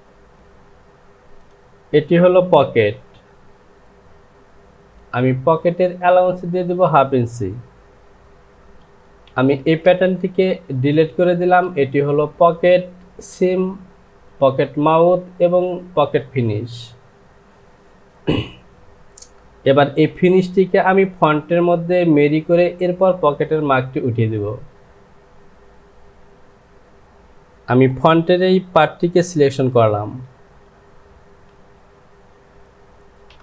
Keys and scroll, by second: 0.3 j, 2.8 Home, 31.6 s, 33.3 Home.